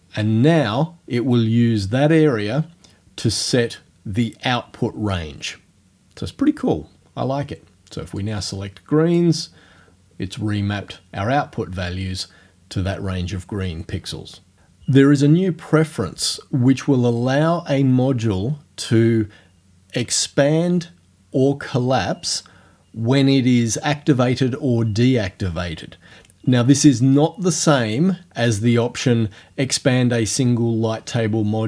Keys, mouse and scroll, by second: 8.2-9.4 drag.